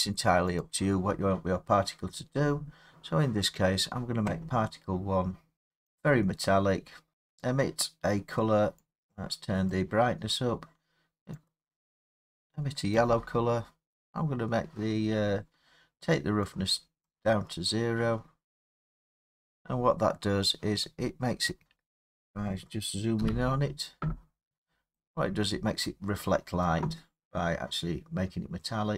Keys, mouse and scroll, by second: 0.6 click, 2.3-3.0 drag, 5.4 middle click, 5.4 middle click, 5.7 middle click, 7.1 middle click, 7.1 click, 9.8 click, 12.9 click, 17.1 click, 21.3 click, 21.5 middle click, 21.6-23.2 scroll down 5, 23.2 scroll, 23.2 scroll down 5, 24.2-24.7 scroll, 25.4 scroll down 7, 25.9 middle click.